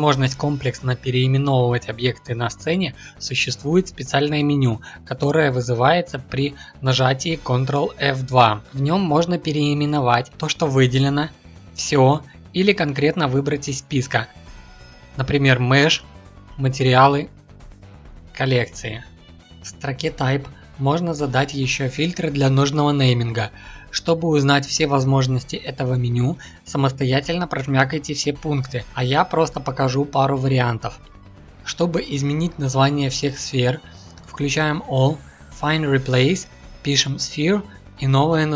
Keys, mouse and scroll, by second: 8.7 ctrl+F2, 34.3-38.5 drag.